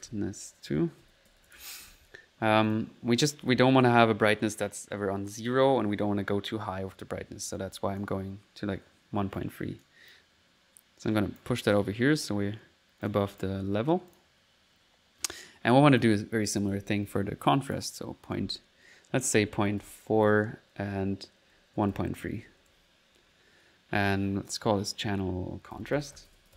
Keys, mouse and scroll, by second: 2.7 click, 7.8 click, 7.8-9.5 typing, 8.3 click, 9.4 right click, 10.1-11.5 drag, 11.8-13.3 drag, 13.0-14.2 typing, 13.3 click, 14.1 click, 17.7 click, 24.5 click, 24.9 click, 25.4 click.